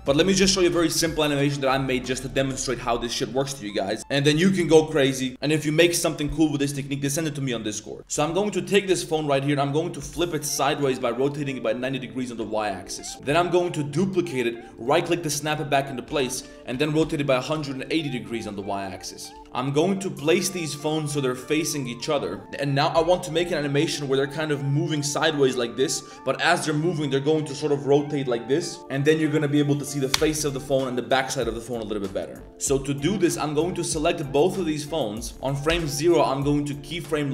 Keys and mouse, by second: 0.8 middle drag, 1.3 click, 1.6 middle drag, 2.0 middle click, 3.8 middle click, 8.3 middle click, 8.6 middle click, 10.6 middle drag, 10.9 shift+middle drag, 13.1 shift+middle click, 18.4 shift+middle click, 18.6 middle click, 19.1 middle click, 21.0-21.4 middle drag, 21.6 middle click, 22.0 click, 22.0 middle click, 22.4 middle click, 32.6 click, 33.4 shift+click, 34.4 click, 34.8 middle click.